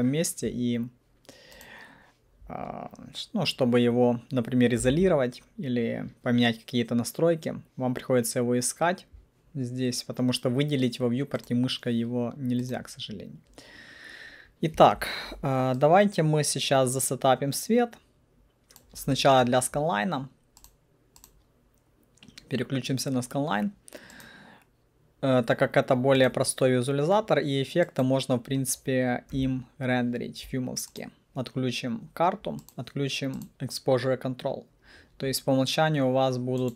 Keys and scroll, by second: 5.0 alt+q, 29.4 8.